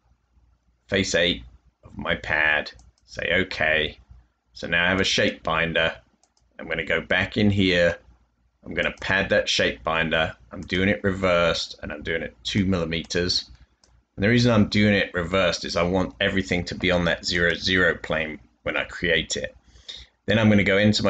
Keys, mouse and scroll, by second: 14.5 2.